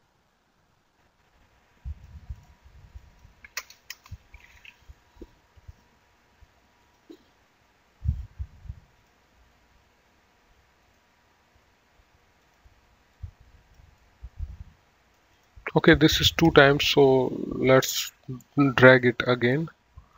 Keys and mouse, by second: 0.9 click, 2.2 click, 3.5 Delete, 3.9 BackSpace, 4.1 Return, 7.0 click, 9.3 click, 11.1 right click, 12.7 click, 14.2 middle click, 15.6 click, 17.0 ctrl+click, 18.7 middle click.